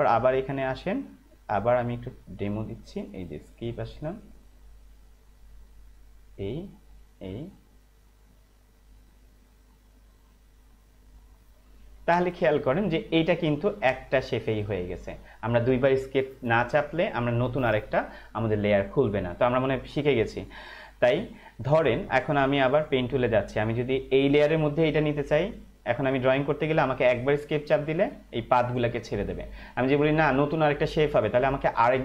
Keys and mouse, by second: 22.9 click, 28.0 Escape.